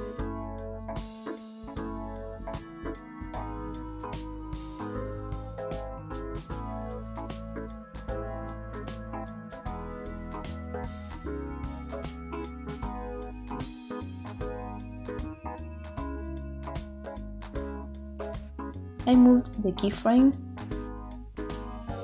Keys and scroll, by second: 0.4 space, 8.4 space, 13.8 8, 14.2 Return, 14.2 0.